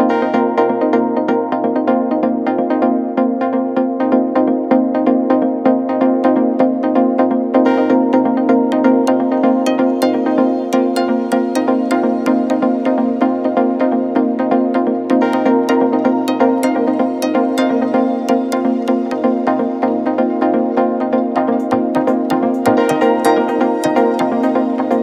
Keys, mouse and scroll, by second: 4.3 ctrl+a, 5.1 click, 8.0-8.7 alt+scroll up 1, 10.7-11.6 alt+shift+drag, 13.1 shift+i, 15.8 click, 16.3-16.7 alt+scroll up 1, 16.9-17.9 drag, 19.3-19.8 alt+scroll down 1, 20.5 ctrl+t, 21.0 alt+scroll down 2, 21.7-24.1 drag, 24.1 click.